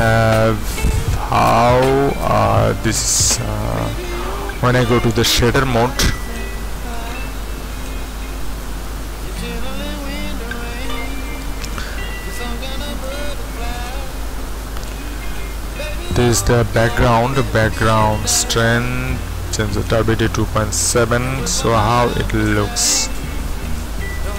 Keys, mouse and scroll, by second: 13.3 ctrl+Up, 14.8-15.6 scroll up 1, 16.2-20.0 drag, 21.4 ctrl+Down.